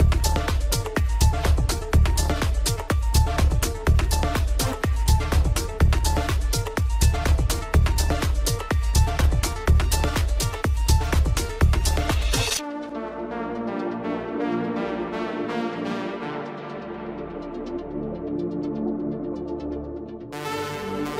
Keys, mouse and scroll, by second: 3.6-3.9 scroll down 3, 3.9-5.4 middle drag, 5.4 scroll up 2, 8.3 click, 9.1-10.5 drag, 10.5-10.9 scroll down 1, 10.9-14.0 middle drag, 14.0 scroll down 1, 14.6-14.9 scroll down 10, 14.9-15.7 middle drag, 15.7-16.2 scroll up 2, 16.2-17.4 middle drag, 17.4-18.0 scroll down 4, 20.1-21.1 drag.